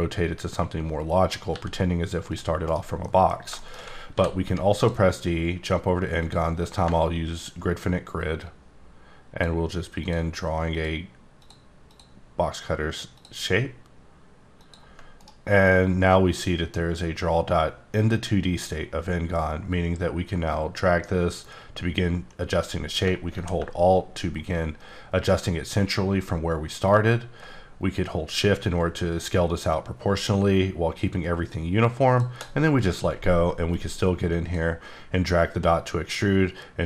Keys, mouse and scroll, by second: 1.2 r, 1.2 click, 1.5 g, 2.7 right click, 3.0 middle click, 3.3 scroll down 1, 3.5 shift+middle click, 4.1 d, 6.2 click, 6.6 scroll up 1, 7.2-8.4 ctrl+scroll down 1, 8.4 ctrl+click, 10.0 ctrl+click, 11.4 ctrl+click, 11.9 ctrl+click, 14.6 ctrl+click, 15.2 right click, 20.8 click, 34.0 click, 36.5-36.8 drag.